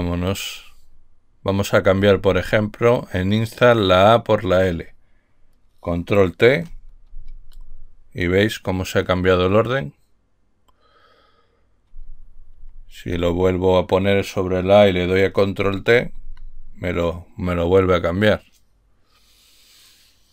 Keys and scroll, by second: 0.1 Up, 2.2 Left, 2.3 Left, 2.6 Left, 7.5 ctrl+t, 13.0 Left, 13.5 Left, 16.4 ctrl+t.